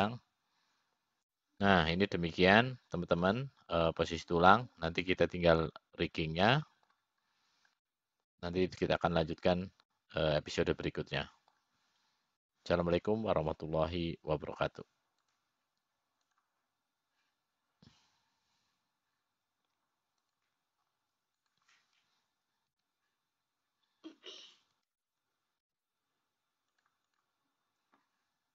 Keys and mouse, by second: 1.3-3.9 drag, 4.4-9.7 middle drag, 10.5-14.5 middle drag, 17.9-19.7 drag.